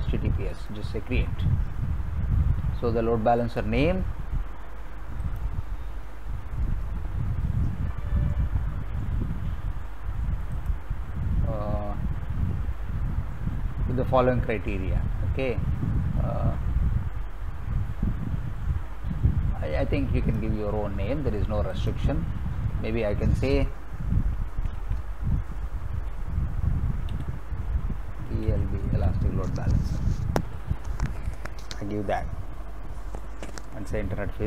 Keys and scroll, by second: 24.3-26.0 typing, 28.0-29.0 typing.